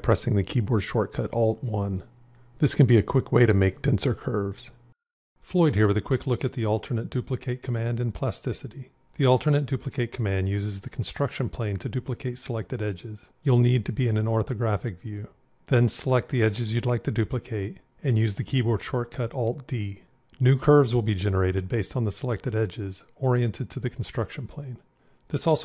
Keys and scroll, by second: 18.6 alt+d.